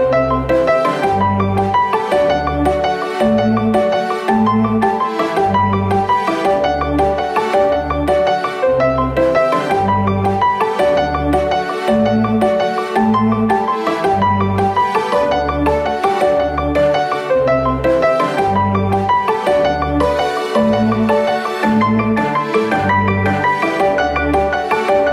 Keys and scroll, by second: 8.2 s, 9.9 Tab, 14.7-15.5 typing.